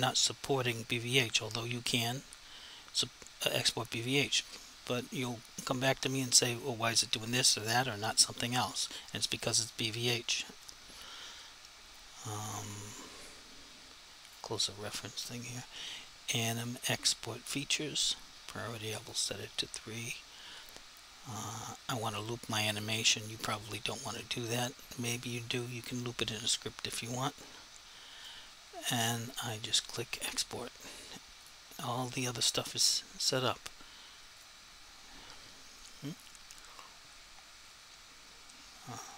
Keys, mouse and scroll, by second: 14.3 click, 22.8 click, 27.5 click, 31.4 click, 34.3 click.